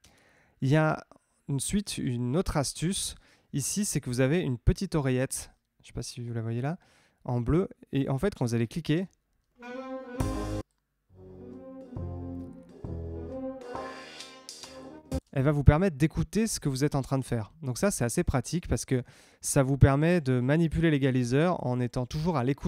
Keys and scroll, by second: 8.8 space, 15.1 space.